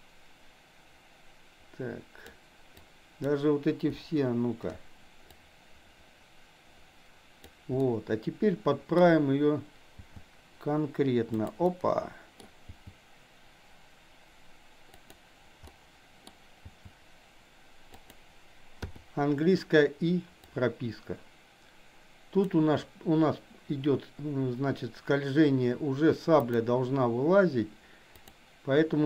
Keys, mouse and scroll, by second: 2.8-3.3 drag, 4.0 Delete, 5.3-7.5 drag, 7.9-9.0 middle drag, 9.9 g, 11.7 scroll up 1, 11.8-12.3 middle drag, 12.7 g, 15.7-16.2 middle drag, 16.2 scroll down 1, 16.8 g, 18.9 i, 20.4-22.5 drag, 26.4 click, 28.2 click.